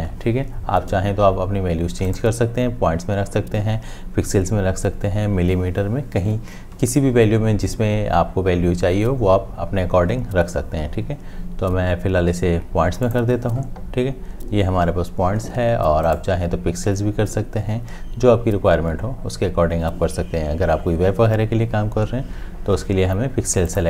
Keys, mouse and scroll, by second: 2.1 right click, 16.1 right click.